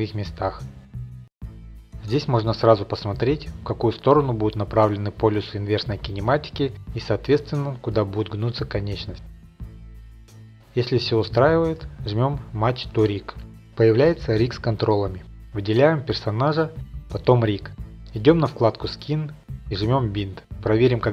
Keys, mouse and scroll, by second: 2.0 click, 2.8 click, 3.5 Tab, 4.2 click, 6.4 middle click, 7.0 click, 8.4 middle click, 9.0 click, 10.8 middle click, 11.0 Tab, 13.0 click, 14.8 middle click, 15.0 scroll, 15.4 ctrl+Tab, 15.4 click, 16.5 shift+click, 18.9 click, 19.8 click, 20.6 ctrl+Tab, 21.0 click.